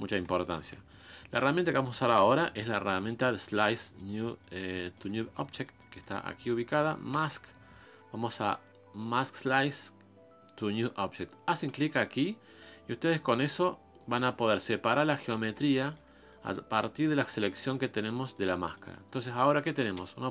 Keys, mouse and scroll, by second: 0.5-2.2 shift+middle drag, 2.2 KP_1, 2.8-13.6 middle drag, 14.3 middle click, 15.2 scroll up 1, 15.3 middle click, 16.1 scroll up 3, 16.3-19.1 middle drag, 19.1-20.0 scroll down 2, 20.0 scroll down 1, 20.1 KP_Divide.